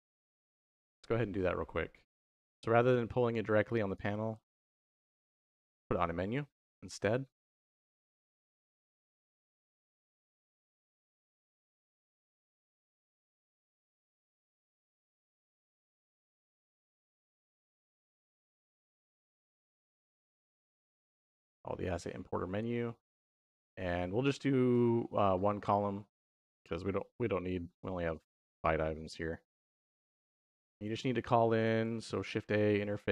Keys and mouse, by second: 1.6 middle click, 3.7 click, 4.2 shift+a, 7.7 click, 9.3-10.0 drag, 10.6 g, 12.4 click, 12.9 middle click, 13.9-20.2 drag, 21.8 click, 23.2 middle click, 30.0 click, 30.5 shift+a, 31.9 shift+a.